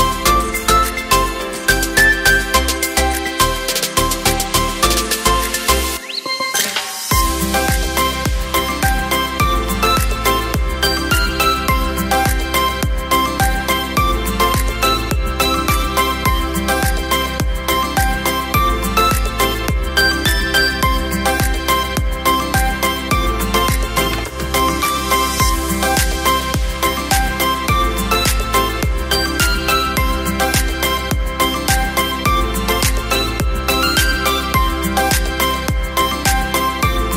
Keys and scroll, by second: 3.9 space, 6.4 o, 7.3 r, 9.8 w, 12.1 space, 17.3 Return, 18.3 Up, 18.5 Up, 18.6 Up.